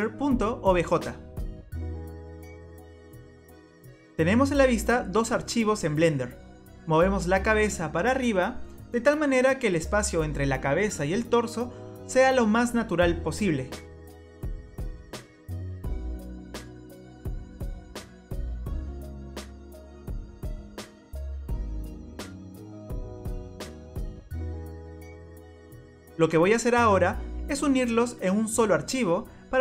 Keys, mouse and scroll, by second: 3.6 click, 6.8 click, 8.0 click, 12.3 click, 15.0 click, 16.8-17.3 scroll down 3, 17.5 middle click, 19.2 scroll up 2, 22.0 middle click, 29.5 click.